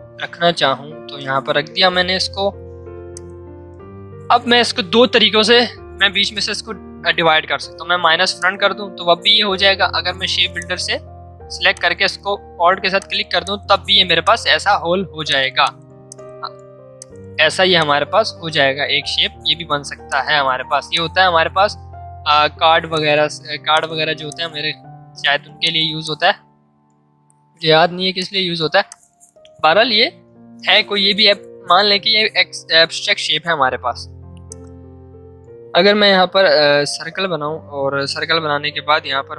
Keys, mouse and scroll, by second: 2.6 v, 3.1-5.9 drag, 8.3 click, 9.4 ctrl+z, 10.6 click, 11.7 alt+click, 12.6 v, 13.0 click, 14.0 space, 14.2 click, 14.9 z, 15.2 alt+click, 16.0 space, 16.1 click, 16.5 v, 20.0 shift+click, 20.9-27.5 drag, 27.5 ctrl+2, 33.4 l, 35.3 space.